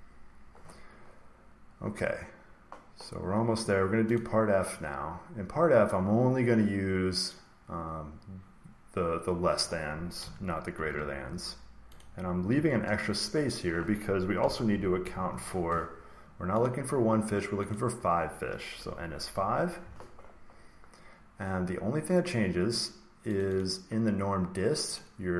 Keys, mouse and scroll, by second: 4.1-6.2 drag, 7.2-9.2 drag, 10.3 click, 10.7 ctrl+c, 11.2 scroll down 1, 11.7 scroll, 11.9 click, 12.9 ctrl+v, 13.5 click, 14.2-15.1 typing, 16.6 click, 17.6 click, 18.7 5, 19.8 Down, 23.3 click, 23.5 click, 24.9 click.